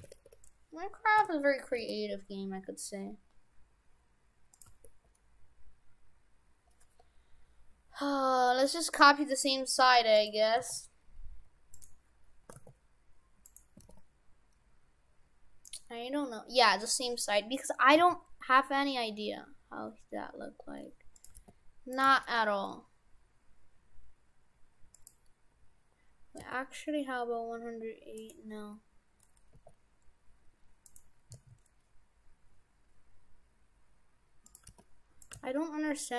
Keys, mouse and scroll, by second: 1.7 g, 4.7 g, 10.6 r, 12.5 r, 13.8 r, 16.3 scroll up 2, 16.9 middle click, 18.0 s, 21.3 g, 22.1 g, 25.1 g, 26.5 r, 29.6 s, 31.3 s, 34.3 s, 34.7 g, 35.3 g.